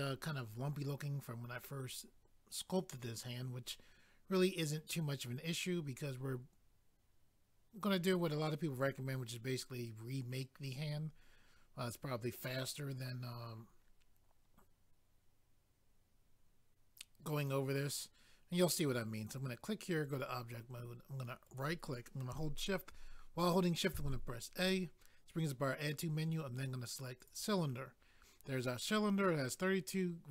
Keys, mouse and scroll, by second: 19.2 click, 19.3 click, 20.0 click, 20.2 click, 21.4 right click, 21.6 right click, 27.2 click, 27.3 click.